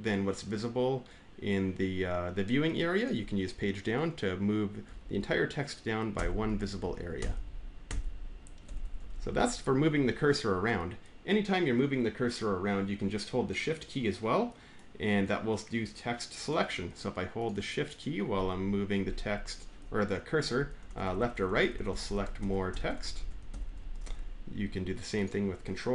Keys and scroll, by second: 4.7 Page_Down, 6.0 Page_Down, 7.0 Page_Down, 7.7 Page_Down, 8.5 Page_Up, 8.7 Page_Up, 13.1 Page_Up, 20.6 Right, 20.9 Right, 21.2 Right, 21.3 Right, 21.6 Right, 21.8 Right, 22.2 Right, 22.2 Down, 22.5 Down, 22.8 Down, 23.0 Down, 23.3 Up, 23.5 Up, 23.9 Up, 23.9 Left.